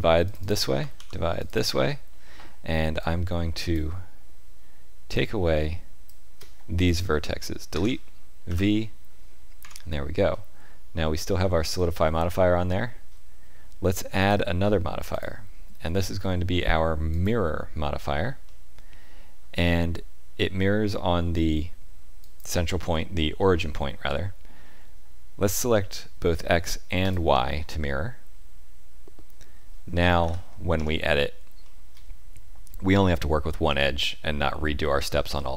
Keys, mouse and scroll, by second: 0.9 ctrl+r, 3.0 click, 5.1 shift+click, 7.7 Delete, 9.6 Tab, 10.3 middle click, 12.2 middle click, 14.1 click, 15.1 click, 18.4 middle click, 22.2 click, 27.0 click, 27.8 middle click, 30.2 ctrl+KP_7, 30.7 Tab, 31.6 shift+middle click.